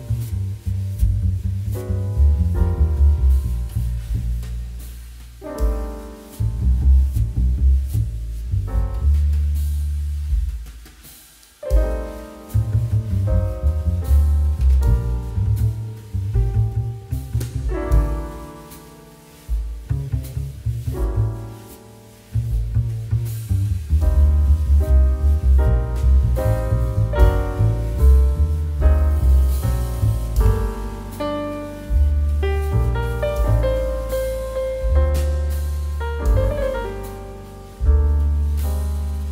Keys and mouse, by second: 2.6 middle click, 4.4 click, 8.6 click, 11.9 click, 14.2 space, 17.0 click, 21.0 click, 26.6 middle click, 26.8 shift+middle click, 27.4 click, 27.8 middle click, 28.7 shift+middle click, 29.2 click, 29.6 ctrl+s, 29.9 click, 30.3 middle click, 30.8 shift+middle click, 31.9 middle click, 32.2 shift+middle click, 35.2 click.